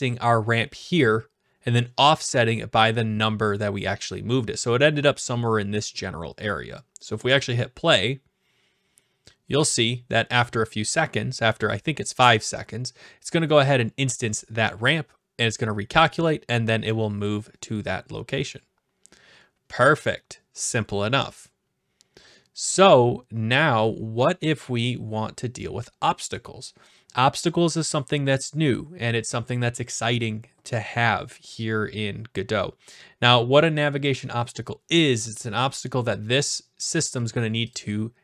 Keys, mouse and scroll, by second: 7.4 click, 37.8-38.2 drag.